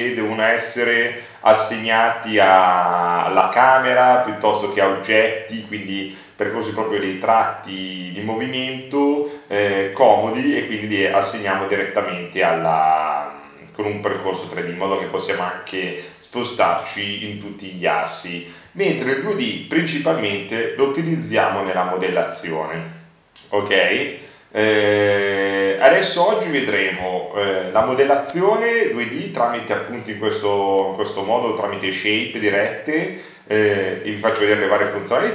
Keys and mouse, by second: 6.7-10.0 drag, 29.6-34.8 drag.